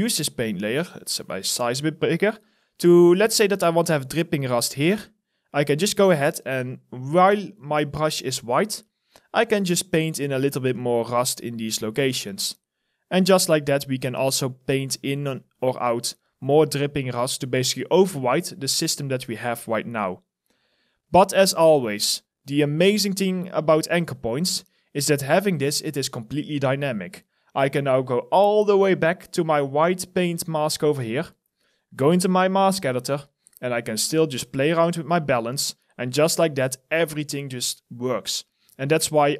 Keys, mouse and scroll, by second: 2.2 alt+click, 2.8 alt+middle click, 3.5 alt+click, 3.9 alt+right click, 10.6 alt+click, 12.0 alt+click, 12.5 alt+middle click, 14.0 alt+click, 14.6 alt+middle click, 15.4 alt+click, 19.7 alt+click, 22.2 alt+middle click, 22.7 alt+click, 25.7 alt+right click, 26.0 alt+click, 26.4 alt+middle click, 26.7 alt+right click, 27.0 alt+click, 27.7-29.8 scroll down 1.